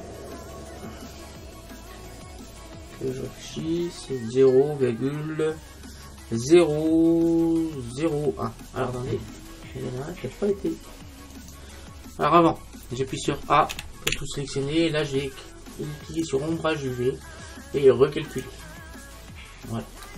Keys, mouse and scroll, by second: 11.6-13.4 right drag, 13.8 a, 14.2 a, 16.2-18.2 drag, 18.4-20.1 drag.